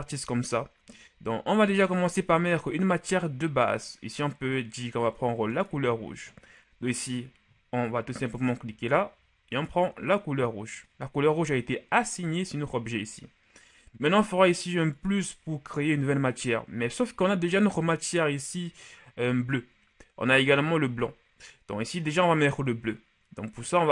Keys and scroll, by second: 1.6 Tab.